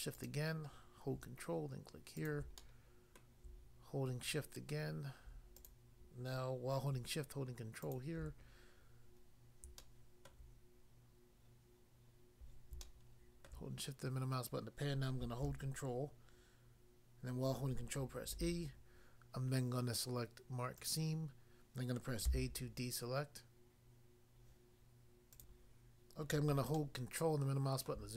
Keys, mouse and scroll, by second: 0.2 shift+click, 2.2 ctrl+click, 2.3 ctrl+click, 2.6 middle click, 3.2 middle click, 5.6 shift+click, 7.9 ctrl+click, 9.8 shift+middle click, 12.8 shift+middle click, 18.3 ctrl+e, 20.7 click, 20.8 click, 22.3 a, 25.3 click, 25.5 click, 26.7 ctrl+middle click.